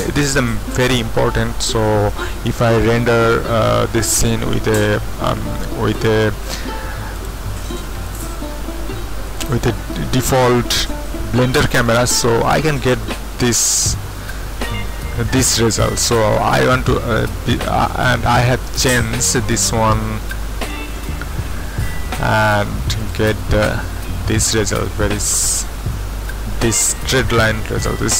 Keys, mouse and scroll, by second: 5.9 click, 7.1 click, 8.1 click, 9.2-16.0 drag, 18.5 click, 20.9 click, 23.0-24.5 drag, 24.5-26.7 middle drag.